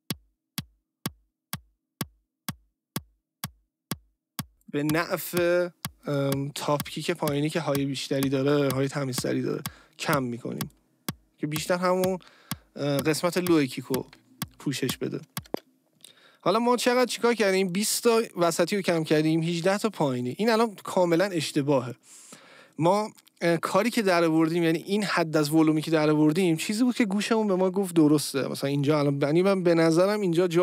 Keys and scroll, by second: 15.4 space.